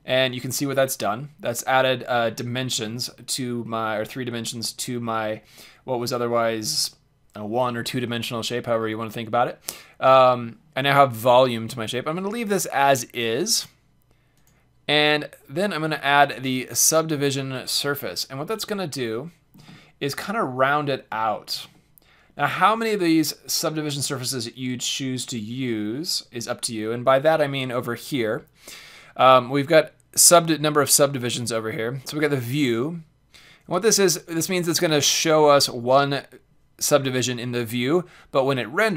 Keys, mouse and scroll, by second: 0.1-2.0 middle drag, 2.3-5.0 middle drag, 14.3-16.1 drag, 18.6-21.3 middle drag, 22.9-23.5 middle drag, 23.9-24.6 middle drag, 25.5-29.3 middle drag.